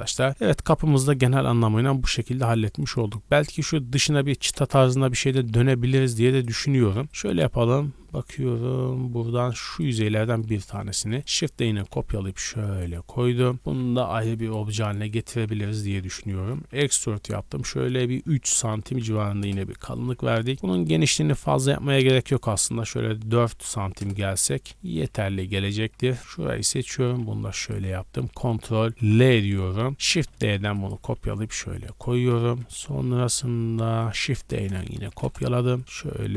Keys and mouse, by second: 0.3 a, 0.3 a, 2.3-4.9 middle drag, 4.9 KP_3, 5.6-6.3 shift+middle drag, 6.3 click, 6.4-9.6 middle drag, 6.8 Tab, 7.0 3, 9.6 click, 10.3 middle click, 11.2 shift+click, 11.2 shift+d, 12.3-15.0 ctrl+middle drag, 14.0 p, 14.7 Tab, 15.0 click, 15.1 middle click, 15.4 Tab, 15.8 a, 16.6 e, 20.3 3, 20.9 g, 25.2 z, 25.5 middle click, 25.9 z, 26.3 z, 26.7 g, 28.3 q, 29.0 ctrl+l, 30.0 shift+d, 30.9 g, 32.3 KP_1, 32.8 KP_3, 33.1 KP_Decimal, 34.1 shift+d, 34.6 r, 35.9 g.